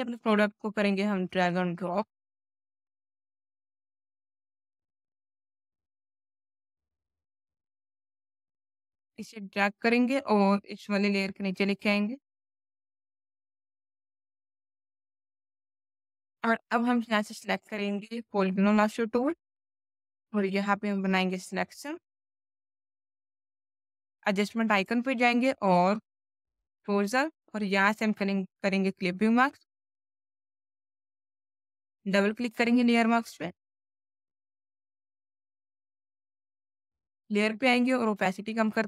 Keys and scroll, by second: 14.4 space.